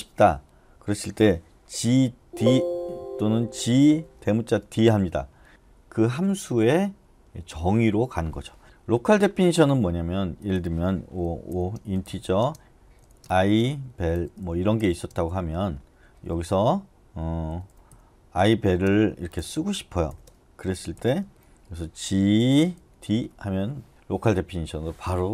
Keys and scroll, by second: 1.5-2.2 typing, 3.9-4.4 typing, 11.3-21.5 typing, 22.5-23.3 typing.